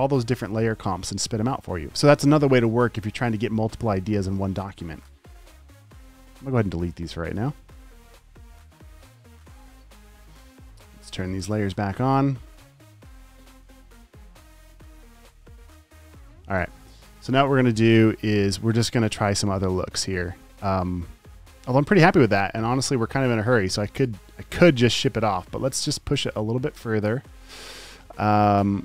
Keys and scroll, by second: 15.4 super+s, 16.0 space, 16.5 space, 16.9 space, 18.4 space, 23.9 space, 25.1 space, 26.9 space, 27.3 space.